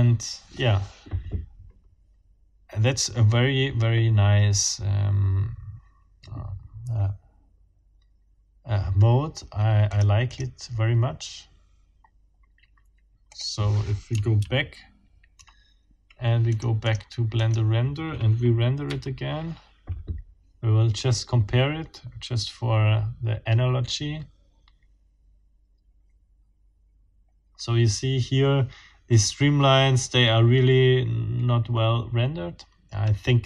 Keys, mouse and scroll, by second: 9.9 click, 10.3 click, 13.3 click, 14.4 ctrl+z, 16.5-17.7 scroll up 6, 18.9 F12.